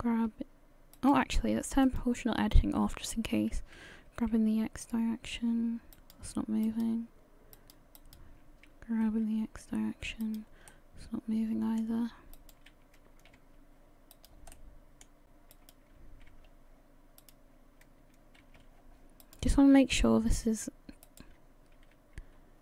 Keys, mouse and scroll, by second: 1.8 click, 3.8 g, 6.7 right click, 7.6 right click, 8.0 right click, 9.1 g, 10.7 middle click, 12.4 right click, 13.1 g, 14.5 middle click, 15.5 right click, 16.3 g, 18.4 g, 20.0 middle click, 21.0 right click, 21.8 g.